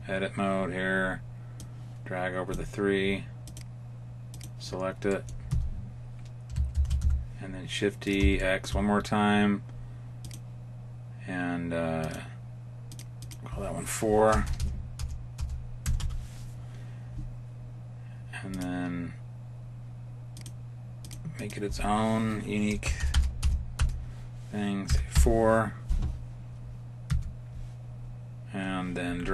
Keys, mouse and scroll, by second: 3.4 click, 5.0 middle click, 5.4 Tab, 6.7 shift+d, 8.3 shift+middle click, 11.5 click, 11.9 click, 12.8 click, 14.4 BackSpace, 14.5 BackSpace, 18.4 click, 20.3 click, 20.9 click, 22.9 BackSpace, 23.0 BackSpace, 27.0 Tab.